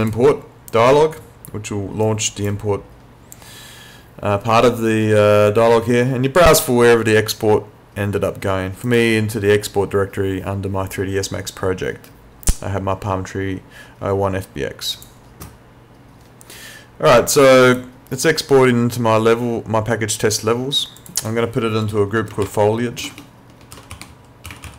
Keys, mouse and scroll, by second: 0.0 click, 8.8 click, 15.0 click, 21.0 click, 22.4-24.7 typing.